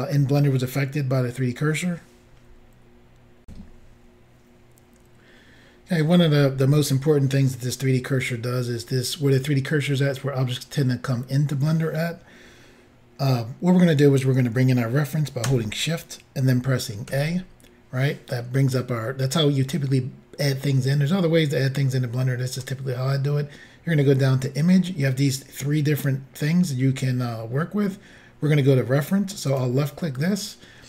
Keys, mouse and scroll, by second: 3.4 Insert, 17.1 a, 29.5 click.